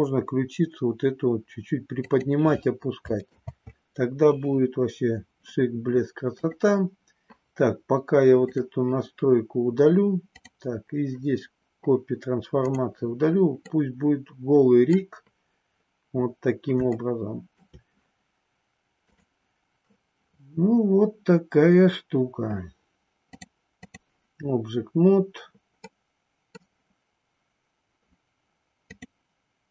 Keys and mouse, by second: 2.1 click, 3.3 ctrl+z, 6.4 click, 8.5 click, 10.2 click, 12.6 click, 13.6-14.9 middle drag, 16.9 shift+middle click, 19.4-21.4 drag, 23.2 click, 25.8 middle click, 28.9 click.